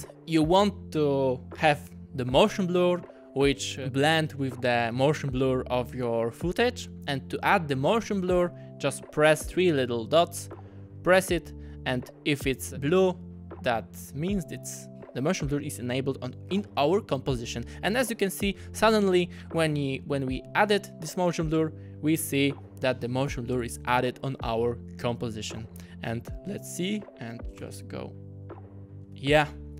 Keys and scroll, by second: 27.0 space, 27.6 space.